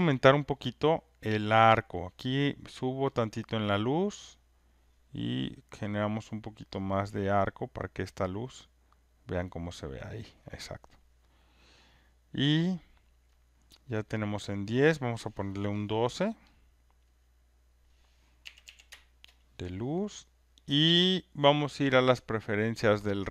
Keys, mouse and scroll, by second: 3.6 click, 4.8-8.3 drag, 10.0-11.0 drag, 13.9 click, 14.9 click, 16.5 click, 17.7 click, 18.2-19.1 typing, 23.1 click.